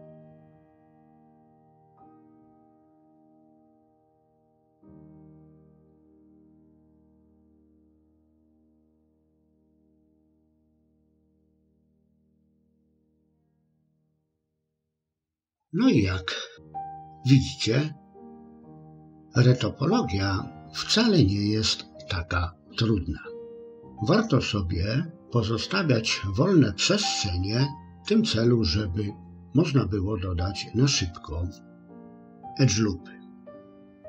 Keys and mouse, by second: 0.0 click, 0.4 click, 1.0 middle click, 1.7 click, 2.0 click, 2.3 shift+click, 2.7 f, 2.9 middle click, 5.3 click, 5.8 click, 6.2 click, 6.7 middle click, 8.3 click, 8.7 click, 9.1 shift+click, 9.6 f, 10.5 click, 11.2 click, 12.7 f, 12.9 middle click, 13.4-18.9 middle drag.